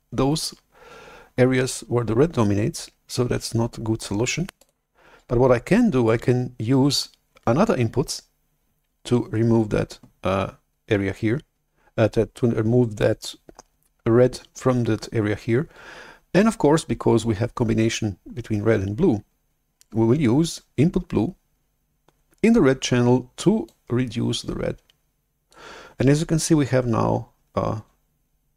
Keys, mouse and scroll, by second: 4.5 click, 23.8-25.4 drag.